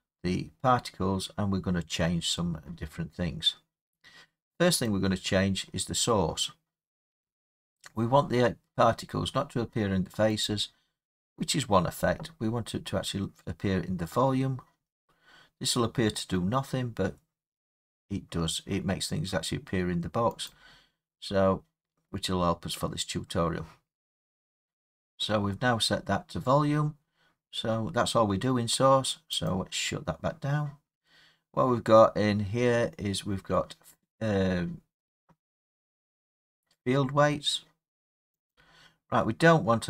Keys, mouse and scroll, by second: 4.8 click, 9.0-9.9 drag, 10.4-15.5 drag, 20.5-25.6 drag, 29.5 click, 32.4 middle click, 32.4 middle click, 34.4 middle click, 34.5 middle click, 38.5 click.